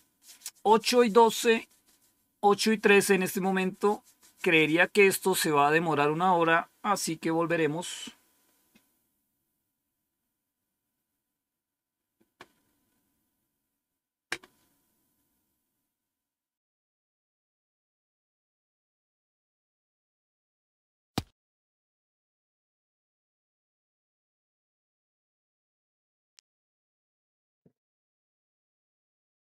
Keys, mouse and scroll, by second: 16.5 click.